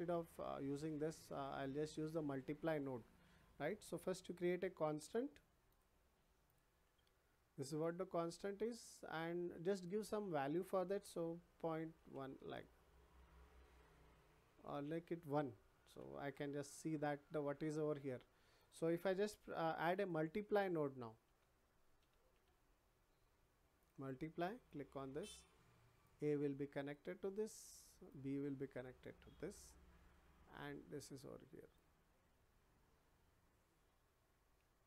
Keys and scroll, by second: 12.0 1, 12.3 Return, 15.8 1, 16.2 Return, 21.2 m, 22.3 l.